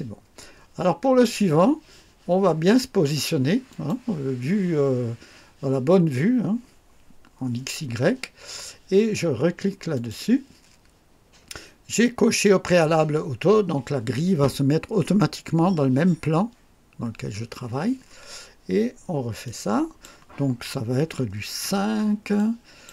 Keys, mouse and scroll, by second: 3.7 click, 9.9 click, 19.4 click, 21.6 5, 22.3 click.